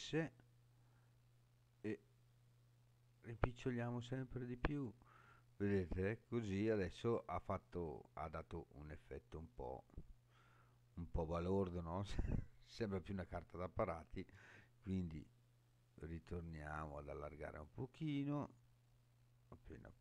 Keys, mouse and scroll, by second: 4.6 click, 5.2 scroll up 3, 6.5-6.9 scroll up 1, 6.9-7.5 scroll down 2, 8.0-8.7 scroll down 1, 8.7-13.1 middle drag, 14.3 s.